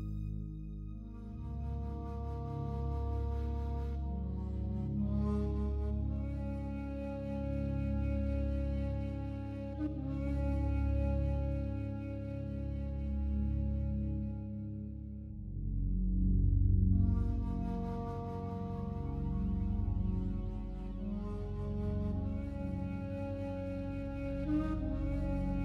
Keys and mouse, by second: 1.1-4.1 drag, 8.9 Tab, 10.3 alt+a, 10.7 b, 11.4 click, 15.0 click, 18.2 click, 21.2-23.3 drag.